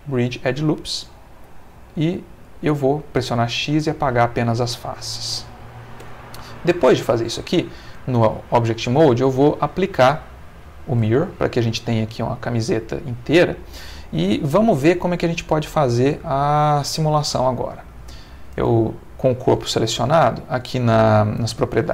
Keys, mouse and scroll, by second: 0.0 ctrl+click, 0.6-2.2 middle drag, 2.7 x, 3.5 click, 4.0-5.9 middle drag, 6.0 Tab, 9.8 click, 10.5 click, 11.3-14.9 ctrl+middle drag, 15.8-17.5 middle drag, 18.1 click, 18.7 g, 19.4 Escape, 20.7 click.